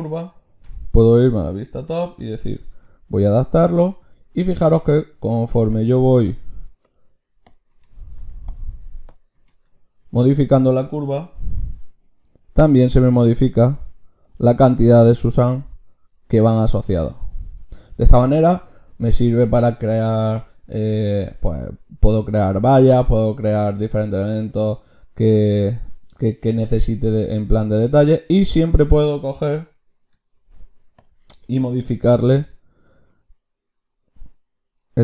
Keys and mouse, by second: 0.6 KP_7, 2.7 g, 3.8 click, 5.7-18.6 drag, 10.3-11.4 right drag, 11.4 g, 13.3 g, 15.4 Tab, 28.0-30.4 drag, 30.4 ctrl+shift+q.